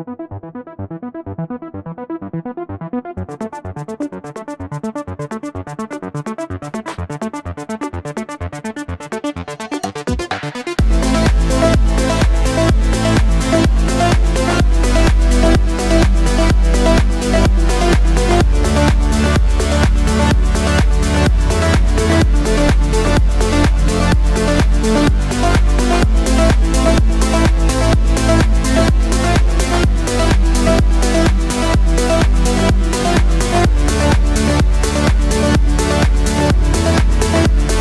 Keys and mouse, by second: 0.8 s, 3.7 KP_1, 3.8 KP_3, 6.9 KP_1, 6.9 KP_3, 7.9 shift+d, 9.5-12.3 drag, 11.3 s, 12.3-33.5 middle drag, 12.6 s, 13.8 KP_1, 14.3 y, 14.8 t, 16.3 r, 17.6 g, 19.4 s, 20.7 g, 22.7 g, 24.9 g, 26.3-29.7 typing, 33.5-36.8 drag, 36.1 s, 36.8-37.8 middle drag.